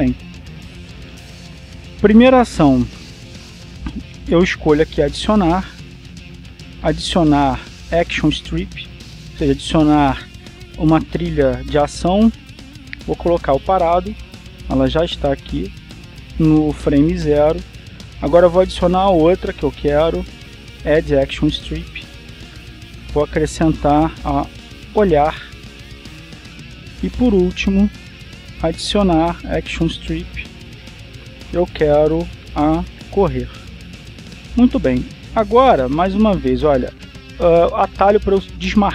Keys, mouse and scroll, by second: 1.7 click, 6.0 click, 13.1 click, 14.8 click, 20.0 click, 22.3 click, 24.1 BackSpace, 26.3 click, 29.4 click, 31.8 click, 33.0 BackSpace, 34.7 click.